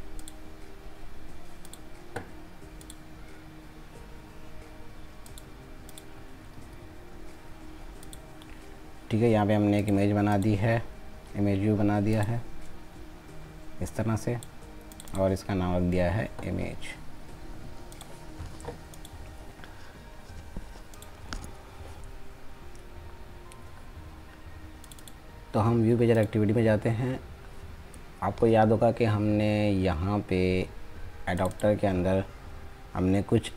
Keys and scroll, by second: 1.4 ctrl+c, 6.3 ctrl+a, 6.6 ctrl+v.